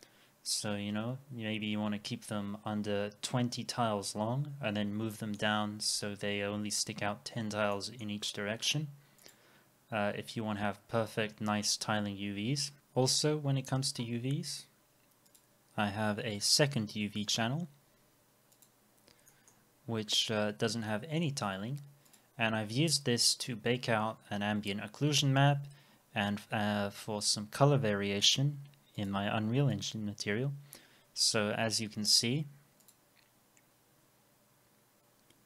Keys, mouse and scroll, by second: 4.7-5.1 scroll down 1, 5.1 middle click, 7.7 middle click, 17.3 double click, 19.3 middle click, 19.7 scroll up 1, 20.9 middle click, 21.7 scroll down 1.